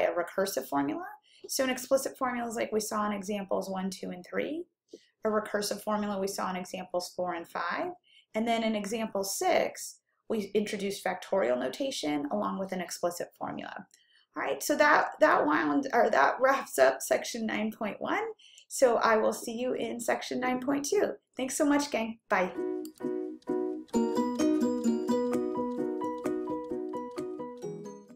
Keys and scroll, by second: 10.1 ÷, 12.8-13.5 typing, 22.3-23.0 typing.